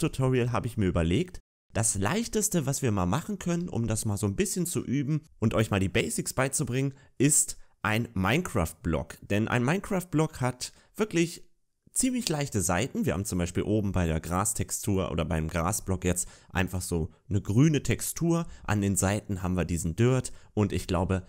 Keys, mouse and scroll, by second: 1.0 middle click, 20.7 middle click.